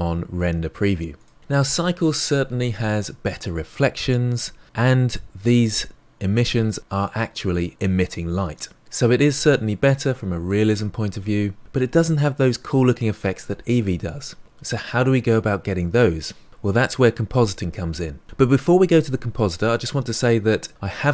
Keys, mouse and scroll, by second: 1.2 click.